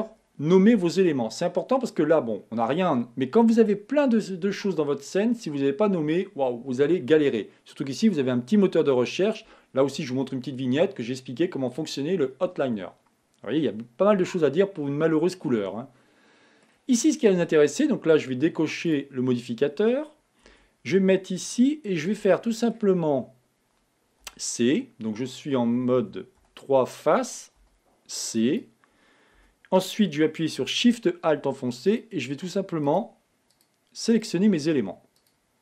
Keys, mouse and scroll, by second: 15.9-17.7 middle drag, 17.7-19.2 scroll down 1, 19.2 click, 20.8 Tab, 21.8-23.3 shift+middle drag, 23.3 scroll up 2, 24.6 c, 26.7 3, 27.9 c, 30.1-32.1 middle drag, 32.1 alt+shift+click, 33.2 alt+shift+click, 33.8 alt+shift+click, 34.4 alt+shift+click, 35.4 alt+shift+click.